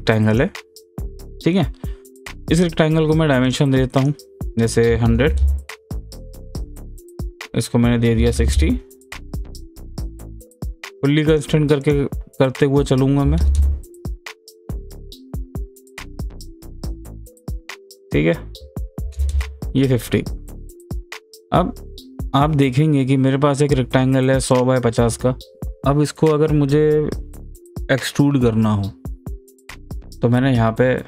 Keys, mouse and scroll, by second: 0.3 click, 3.5 click, 5.8 click, 6.7 click, 10.2 click, 11.9 click, 16.1 click, 17.4 click, 19.7 click, 20.8 click, 24.5 click, 24.5 click.